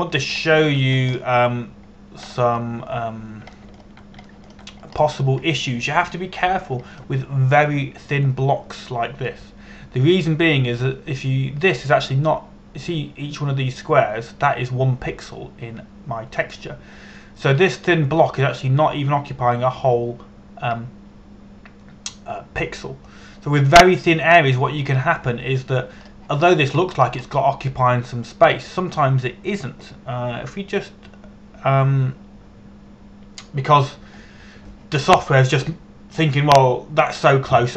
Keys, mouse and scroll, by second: 1.2-1.6 scroll up 1, 1.6 scroll down 1, 2.1 shift+middle click, 2.7-4.8 scroll up 1, 4.8-5.1 scroll down 1, 5.2 shift+middle click, 6.0 shift+middle click, 6.6-7.0 scroll up 1, 24.3 scroll up 1, 24.4-25.0 scroll down 1, 26.5-27.5 scroll up 1.